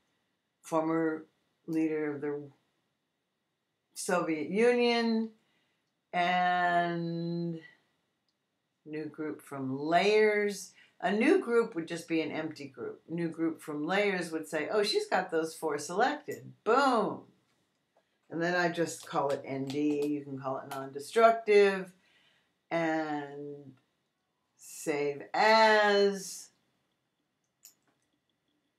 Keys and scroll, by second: 19.2 shift+n, 19.6 shift+d, 20.5 shift+Return.